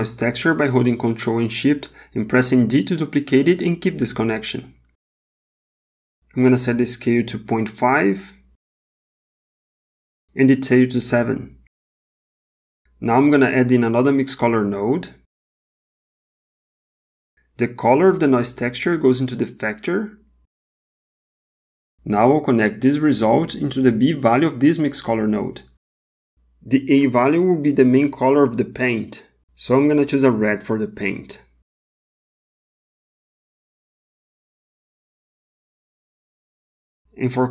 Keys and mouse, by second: 2.4 ctrl+shift+d, 7.2-9.0 drag, 10.2-11.6 drag, 13.4 shift+a, 19.2-21.1 drag, 23.3-24.4 drag, 35.5 KP_0, 35.8 KP_0.